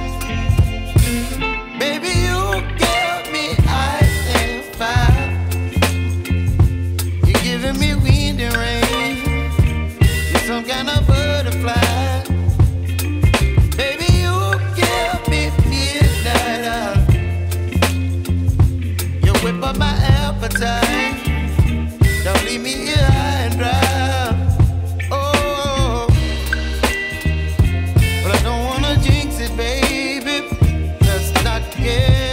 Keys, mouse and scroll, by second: 6.6 ctrl+s, 14.2 shift+click, 15.1-15.8 scroll down 2, 16.4 g, 18.2 scroll up 3, 19.3 ctrl+s, 21.8-24.0 scroll up 4, 25.4-28.1 drag, 28.1-29.2 scroll down 4, 29.2 scroll down 1, 29.5 ctrl+s, 30.4 scroll down 2, 31.5 ctrl+z.